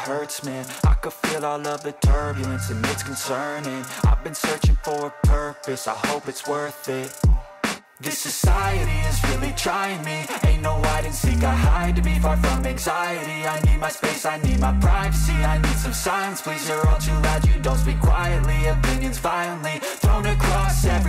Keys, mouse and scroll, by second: 1.2 click, 2.4 click, 7.6 click, 8.8 right click, 11.4 click, 12.5 click, 14.0 ctrl+a, 16.5 ctrl+v.